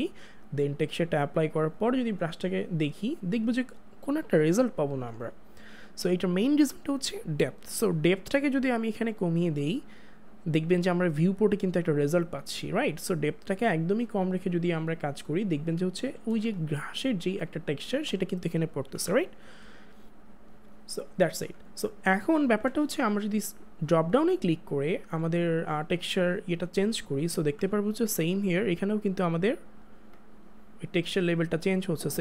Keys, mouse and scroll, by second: 1.5 click, 9.2 click, 11.8 click, 16.4 ctrl+space, 16.6 ctrl+click, 16.9 ctrl+space, 19.0 ctrl+z, 20.2 ], 22.6 ctrl+z, 23.8 click, 28.2 click.